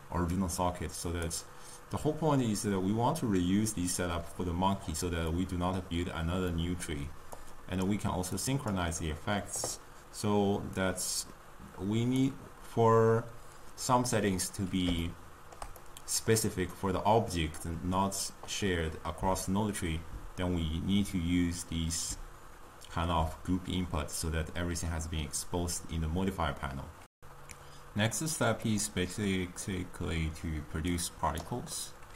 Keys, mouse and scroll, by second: 15.1-27.9 shift+middle drag, 31.9-32.1 middle drag.